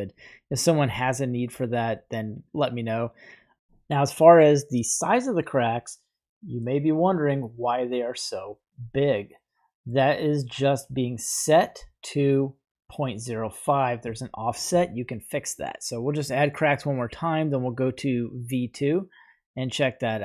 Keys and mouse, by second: 0.4 right click, 0.7 g, 1.9-3.5 middle drag, 6.6-7.7 middle drag, 9.3-9.9 middle drag, 12.3-13.0 middle drag, 13.6 right click, 14.2-14.7 shift+middle drag, 16.6 click, 16.7 typing, 19.4-20.2 middle drag.